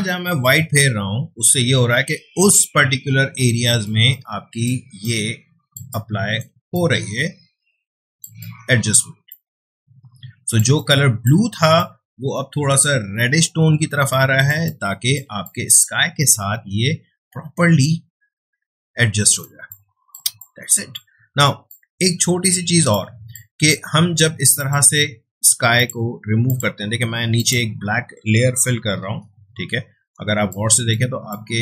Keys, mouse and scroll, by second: 3.9 space, 4.1 click, 4.4 space, 5.0 click, 5.7 space, 5.9 click, 6.3 space, 6.7-8.2 drag, 8.2 space, 8.4 click, 8.7 space, 9.3-10.6 drag, 10.6 space, 10.8 click, 11.1 space, 11.8-14.5 drag, 14.5 space, 14.6 click, 15.0 space, 15.4-19.5 drag, 19.5 space, 19.7-21.7 ctrl+drag, 21.7-24.6 ctrl+drag, 28.6 d, 29.1 alt+BackSpace, 30.2 space, 30.5 click, 30.7 space, 31.3 click, 31.5 space.